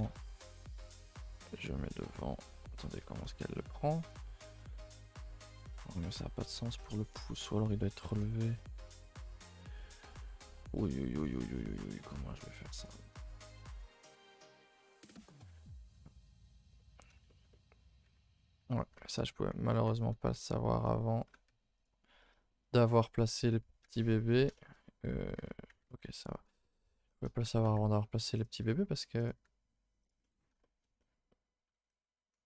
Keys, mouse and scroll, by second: 2.7 scroll down 1, 3.0-4.0 shift+middle drag, 4.0-4.8 scroll down 2, 4.8 middle click, 5.0-5.3 scroll up 2, 5.3-8.2 middle drag, 8.2 scroll up 1, 8.5 shift+middle click, 8.9 scroll up 2, 9.1 scroll down 1, 9.2-10.4 shift+middle drag, 10.4-10.8 scroll up 1, 10.8 middle click, 11.6 alt+click, 11.9-14.1 middle drag, 14.1 alt+shift+click, 14.7 ctrl+z, 15.1 alt+shift+click, 15.8 z, 16.0-18.5 shift+middle drag, 18.5 c, 19.7 ctrl+z, 20.8 c, 21.8 z, 22.0 scroll down 1, 22.1-25.3 middle drag, 25.3 alt+h, 25.8 ctrl+z, 26.2 middle click, 26.7 scroll up 2, 27.0 shift+middle click, 27.6 g, 28.6 r, 29.3 g, 30.2-32.4 middle drag.